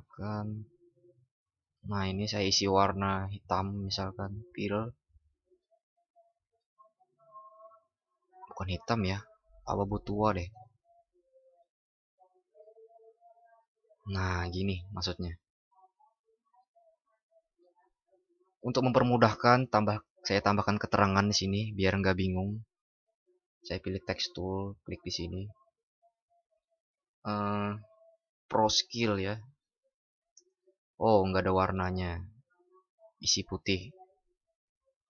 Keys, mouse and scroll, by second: 31.2 ctrl+shift+@.